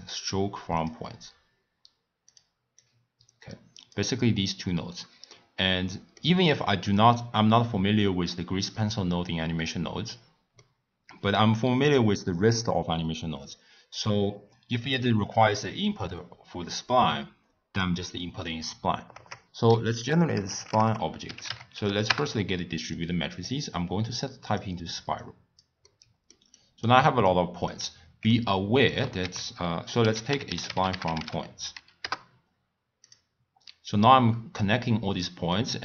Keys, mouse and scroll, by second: 2.8 click, 5.3-8.4 middle drag, 10.6-13.6 middle drag, 14.5 click, 19.1 ctrl+a, 23.5-25.8 drag, 25.8 middle click, 26.5-28.3 drag, 28.3 middle click, 29.2 ctrl+a, 33.9 drag.